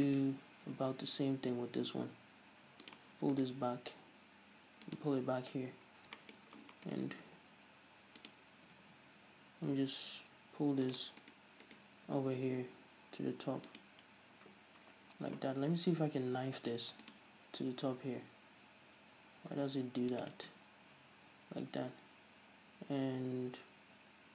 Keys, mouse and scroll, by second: 0.9 g, 3.2 click, 3.6 right click, 3.8 g, 5.2 click, 5.7-6.2 scroll down 2, 6.2 scroll up 2, 6.4 shift+middle click, 6.7-7.1 scroll up 2, 7.1 right click, 7.5 g, 8.6 click, 8.9 g, 11.2 click, 11.5 right click, 12.4 g, 14.1 click, 16.5 k, 20.8 space.